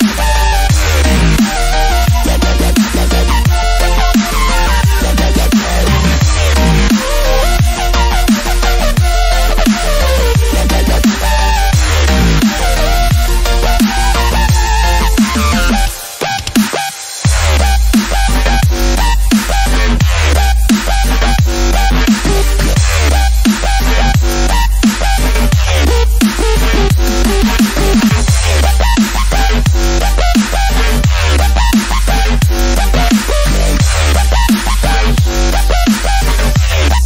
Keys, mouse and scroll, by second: 4.6 click, 7.1 shift+F5, 9.1 click, 10.5 click, 12.0 click, 13.0 alt+scroll up 1, 13.6-13.9 alt+scroll up 1, 14.3-15.9 typing, 16.4 click, 18.9-27.1 drag, 27.5 click, 28.3-30.9 drag, 30.9 ctrl+z, 32.4 typing, 35.2-37.0 drag.